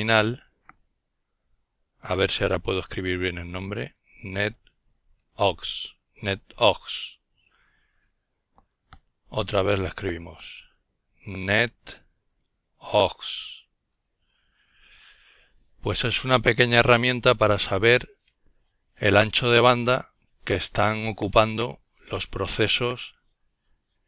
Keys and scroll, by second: 2.1-5.3 typing, 8.9-11.4 typing, 13.0-13.6 typing.